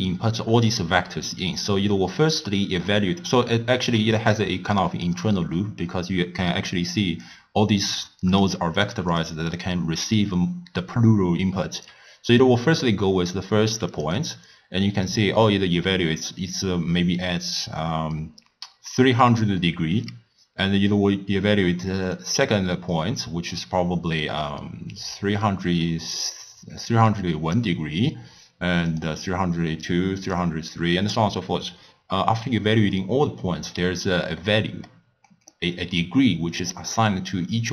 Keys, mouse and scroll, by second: 4.0-4.8 middle drag, 4.8 click, 8.0 click, 8.4 drag, 8.8 click, 9.2 click, 9.5 click, 11.9-33.6 typing, 13.9 click, 22.1 click, 28.9 click, 29.1-30.3 middle drag, 30.3 click, 34.4-35.6 middle drag, 35.6-37.7 d.